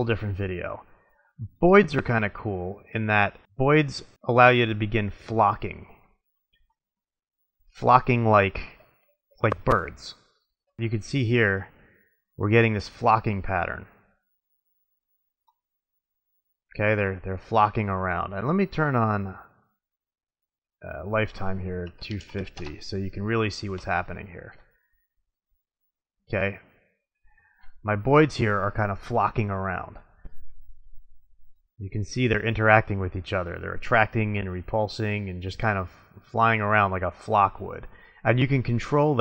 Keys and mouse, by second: 2.8 click, 6.6-8.5 middle drag, 16.1-17.3 middle drag, 18.9-20.8 drag, 20.8 middle click, 21.1 click, 24.8-26.6 middle drag, 30.8 middle click, 33.6-34.6 middle drag, 35.1-36.1 middle drag, 36.3 middle click, 37.9-38.6 middle drag.